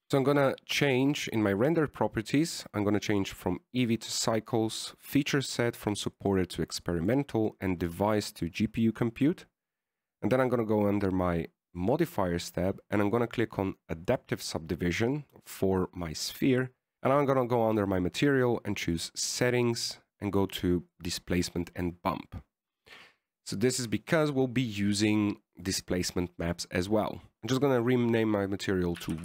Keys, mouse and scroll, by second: 0.1 right click, 0.8 click, 4.4 click, 5.9 click, 8.2 click, 13.1 click, 15.4 click, 16.9 click, 16.9-18.4 scroll down 10, 20.2 click, 20.5-21.6 scroll down 8, 21.6 click, 25.0 click, 27.3 click, 27.3 p, 28.2 BackSpace, 28.4 BackSpace.